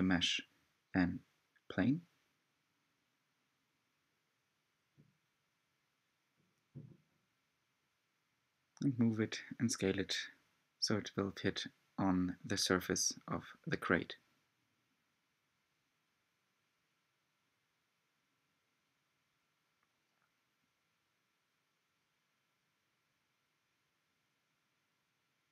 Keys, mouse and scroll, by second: 0.5 s, 2.5 g, 11.9-13.8 middle drag, 13.8 s, 19.9 g.